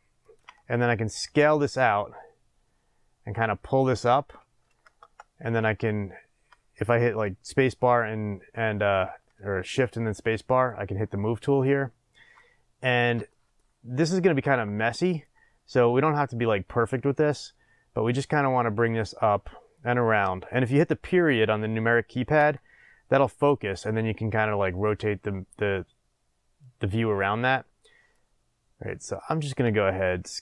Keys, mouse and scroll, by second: 0.3 click, 1.2 s, 3.8 click, 4.8 shift+space, 12.3-15.2 middle drag, 15.2-18.6 drag, 18.6-28.1 middle drag, 28.1-30.4 drag, 30.0 s.